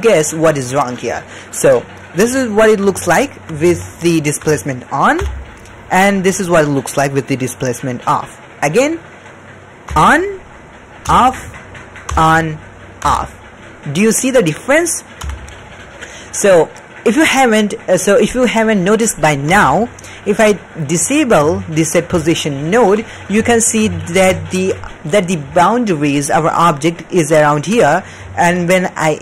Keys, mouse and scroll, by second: 3.2 shift+middle click, 3.7-4.4 ctrl+middle drag, 5.2 m, 9.9 m, 11.0 m, 12.1 m, 13.0 m, 15.2 m, 19.4 m, 21.5 shift+middle click, 22.9-23.2 shift+middle drag, 23.4-23.7 ctrl+middle drag, 23.9 shift+middle drag, 24.4 ctrl+middle click, 24.9 d, 25.4-26.2 d, 26.2-27.6 drag, 27.6 d.